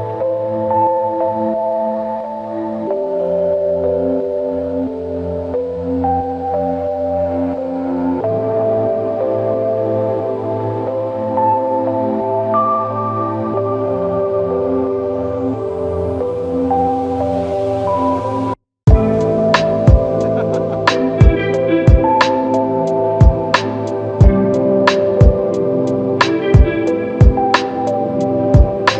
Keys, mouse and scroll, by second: 0.6 ctrl+click, 4.9 ctrl+click, 17.7 f, 19.3 double click, 23.0 alt+click, 24.4 alt+click, 25.7 double click, 27.9 alt+click.